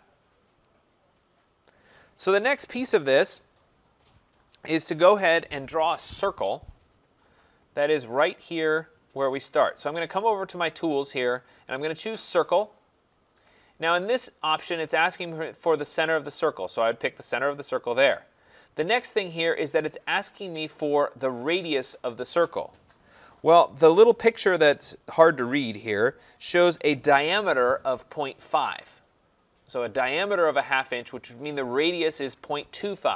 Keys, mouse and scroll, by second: 2.3 right click, 5.9-6.8 scroll, 7.2 right click, 7.6 scroll, 13.2-22.4 drag.